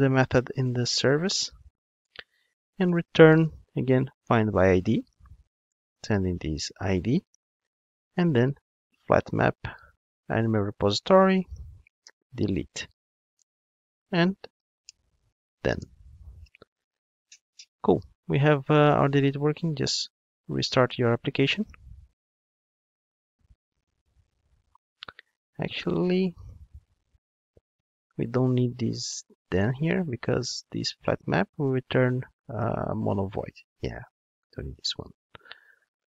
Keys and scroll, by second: 4.2 Return, 8.8 Return, 16.4 alt+super+l, 20.1 ctrl+d, 32.6 super+b, 34.0 ctrl+Tab, 34.8 super+x.